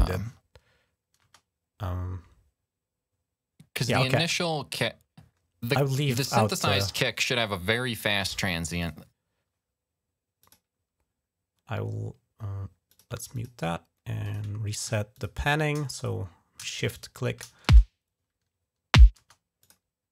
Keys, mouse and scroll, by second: 1.0 space, 4.5 click, 5.7 click, 7.7 click, 8.6 click, 10.2 click, 12.7 click, 13.2 click, 14.1 click, 15.0 shift+click, 15.8 click, 16.7 shift+click, 17.0 shift+click, 17.5 space, 19.0 space, 19.4 click, 20.0 click.